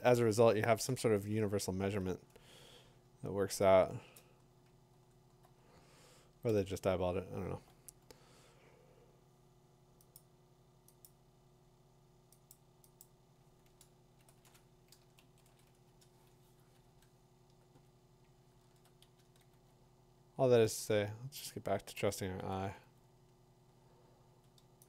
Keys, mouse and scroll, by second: 0.7 scroll, 1.7 middle click, 3.9 middle click, 4.0 middle click, 4.1 middle click, 4.1 click, 4.9 middle click, 4.9 middle click, 5.0 middle click, 5.4 middle click, 6.5 Delete, 7.4 middle click, 7.4 middle click, 7.5 middle click, 10.1 click, 11.0 click, 12.5 click, 13.0 click, 15.2 shift+n, 15.4 click, 16.4 click, 16.4 e, 16.8 Tab, 17.6 Tab, 21.7 Tab, 21.7 middle click, 21.9 Tab, 22.7 f.